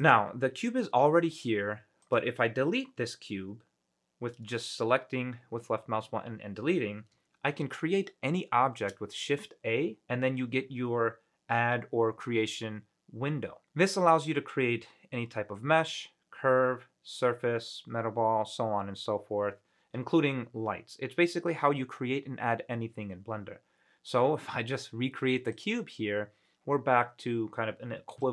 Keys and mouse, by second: 0.2 click, 2.2 click, 3.1 Delete, 9.0 shift+a.